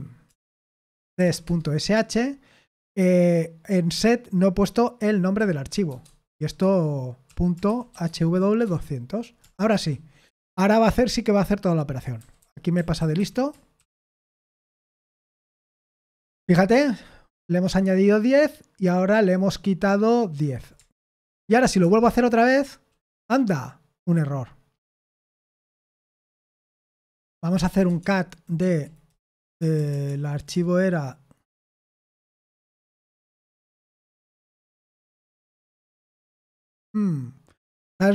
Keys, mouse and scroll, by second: 0.0-1.7 typing, 1.8 Return, 3.9-10.2 typing, 11.9-14.7 typing, 15.0 ctrl+p, 15.5 Return, 21.1 ctrl+p, 21.8 Return, 27.3-28.3 typing, 28.6 Right, 29.6-30.5 typing.